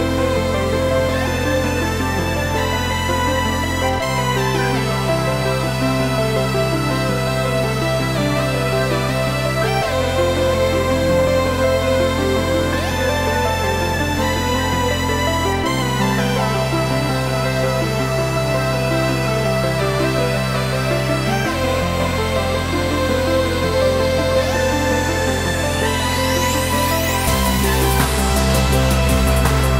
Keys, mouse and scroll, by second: 0.2-5.4 drag, 6.0-19.4 drag, 19.9 KP_3, 20.8 g, 21.5 click, 21.8-23.6 middle drag, 22.3 scroll down 2, 23.6 click.